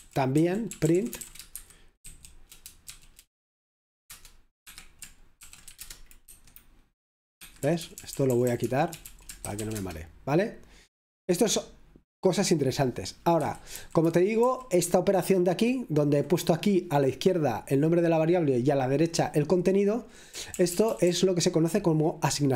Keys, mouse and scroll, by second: 0.5-8.2 typing, 6.3 Return, 9.0 F5, 9.5 e, 13.5 Escape, 13.7-16.0 typing, 17.5 typing, 20.5 typing, 22.5 typing.